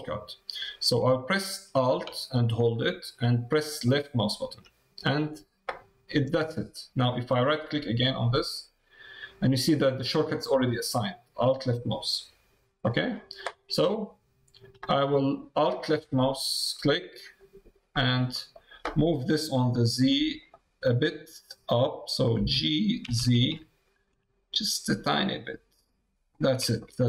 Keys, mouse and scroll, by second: 2.1-4.0 alt+right drag, 7.9 click, 11.1-14.0 right drag, 15.6 alt+click, 16.3 middle click, 16.7 middle click, 18.3 middle click, 20.5-22.0 middle drag, 22.3 g, 26.8 middle click.